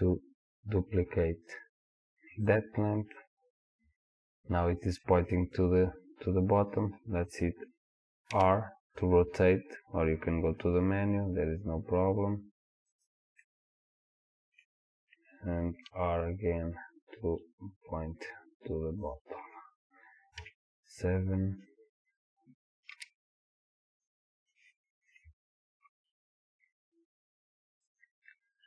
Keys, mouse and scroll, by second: 3.2 middle click, 6.0-8.4 scroll down 2, 8.4 r, 13.4-19.1 middle drag, 15.9 r, 19.1 click, 20.4 KP_7, 23.0 g, 28.2 click.